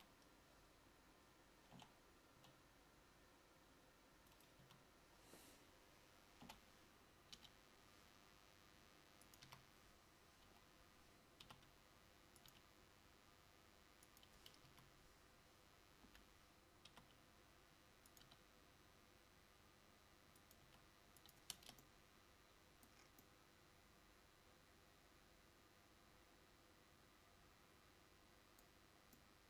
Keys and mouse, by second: 0.0 a, 2.0 l, 2.5 g, 4.7 a, 6.5 l, 7.5 g, 9.7 a, 10.7 l, 14.8 a, 16.3 l, 21.7 Tab, 21.7 r.